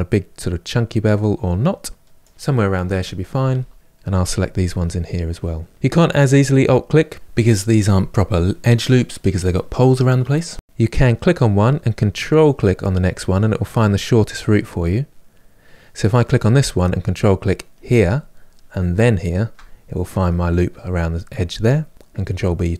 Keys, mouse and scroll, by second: 3.0 click, 3.7 middle click, 3.9 shift+click, 4.2 shift+drag, 4.5 shift+drag, 10.6 click, 10.9-11.9 middle drag, 11.9 ctrl+click, 12.5-15.8 middle drag, 15.8 drag, 17.4 ctrl+click, 17.8-19.0 middle drag, 19.0 ctrl+click, 20.2-22.2 middle drag, 22.2 ctrl+b.